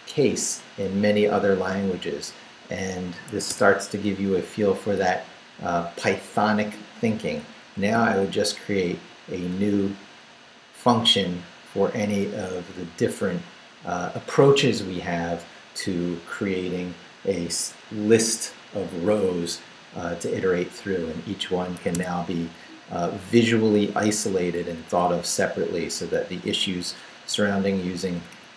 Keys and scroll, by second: 3.3 Escape, 3.9 Down, 5.1 Left, 7.7 shift+v, 8.1 shift+Down, 10.0 Down, 21.8 Escape, 22.6 Down, 23.6 Down, 24.6 Down, 25.2 Up, 26.1 Up, 28.3 Up.